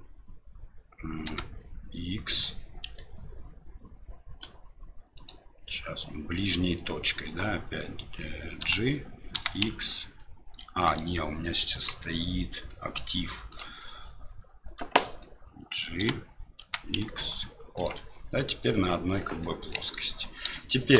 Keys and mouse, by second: 8.6 g, 11.8-13.8 drag, 16.0 g, 19.4 middle click.